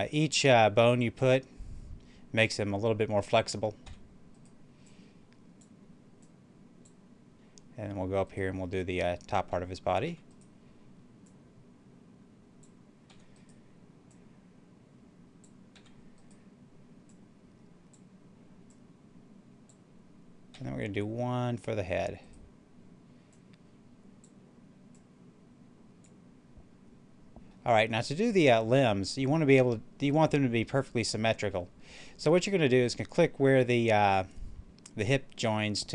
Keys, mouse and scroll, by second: 0.8 click, 3.8 e, 4.2 right click, 4.7-8.1 drag, 8.1 right click, 10.0 e, 10.2 right click, 11.2-13.0 drag, 13.0 e, 13.2 right click, 14.0-15.7 drag, 15.7 e, 16.1 right click, 17.0-20.4 drag, 20.4 e, 22.1 right click, 23.2-27.4 drag, 27.4-28.7 middle drag, 28.7 scroll up 1, 30.4-33.9 middle drag.